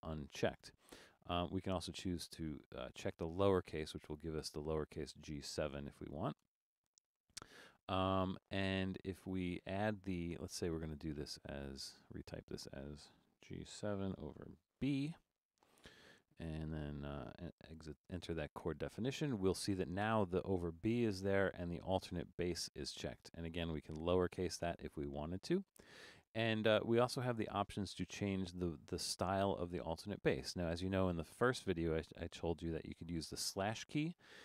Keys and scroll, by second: 6.5 Return, 13.4-15.7 typing, 17.7 Return.